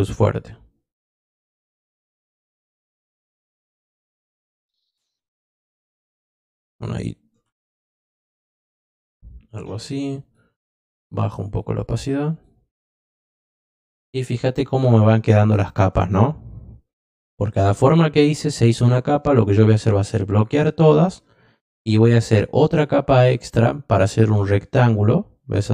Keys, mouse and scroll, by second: 1.9 click, 3.5 click, 4.4 click, 6.2 click, 10.2 click, 10.7 click, 11.4 click, 12.2 click, 13.1 click, 14.8 click, 19.0-20.4 drag, 22.2 click, 23.9-25.7 drag.